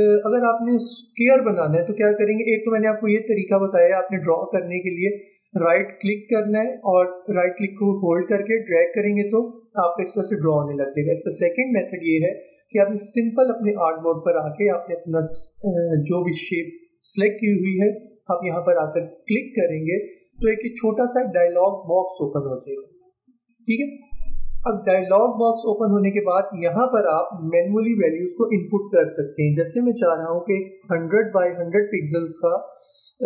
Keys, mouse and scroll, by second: 1.2 click, 5.1-11.9 drag, 11.9 ctrl+z, 19.2-24.7 drag, 26.0-29.6 drag, 29.8 1, 30.9 typing.